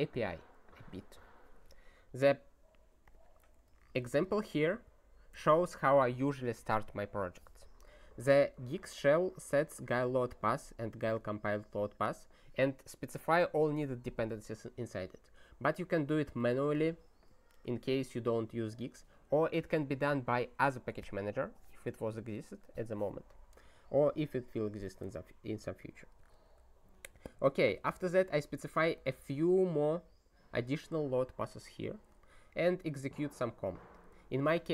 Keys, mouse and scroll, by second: 3.1 click, 3.9 ctrl+n, 4.0 ctrl+space, 4.2 ctrl+n, 5.3 ctrl+g, 8.8 click, 9.5 click, 10.3 click, 11.1 click, 16.4 click, 16.7 ctrl+space, 16.8 ctrl+e, 17.2 ctrl+g, 18.8 click, 25.5 ctrl+n, 25.8 ctrl+a, 26.1 ctrl+space, 26.3 ctrl+e, 27.3 ctrl+g, 28.9 click, 30.6 click, 31.8 ctrl+g, 32.9 click, 33.9 click, 34.3 ctrl+g.